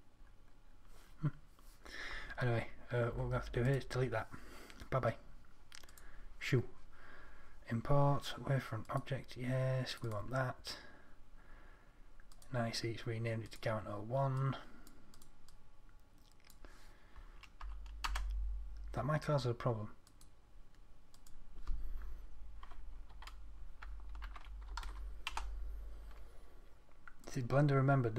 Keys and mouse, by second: 3.4 Delete.